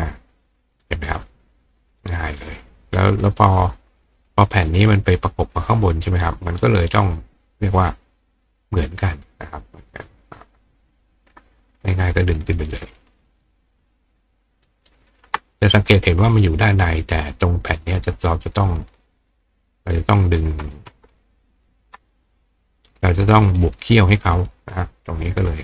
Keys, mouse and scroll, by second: 1.9 click, 2.3 right click, 3.3 click, 6.5 click, 8.6-9.2 drag, 11.4-14.9 ctrl+drag, 14.7-17.7 ctrl+right drag, 15.5 click, 18.5-20.7 drag, 21.2 ctrl+click, 22.0 click, 22.1-25.6 right drag, 23.1 click, 24.0 click.